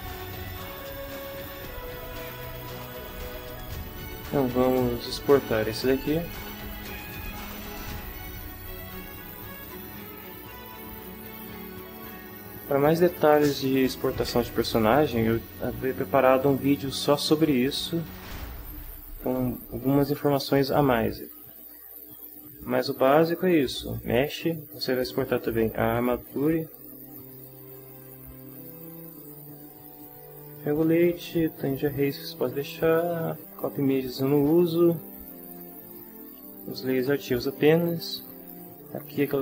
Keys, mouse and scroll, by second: 0.0 ctrl+alt+Right, 2.3-3.5 ctrl+middle drag, 6.0 click, 9.6 click, 26.2 shift+click.